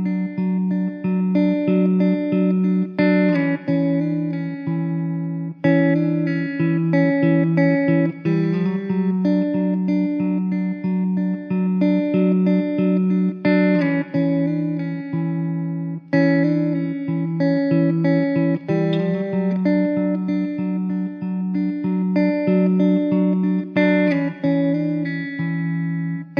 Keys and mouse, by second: 0.7 alt+w, 1.4 alt+w, 2.1 middle click, 5.2 alt+w, 6.0 middle click, 6.5 2, 15.4 middle click, 18.6 1.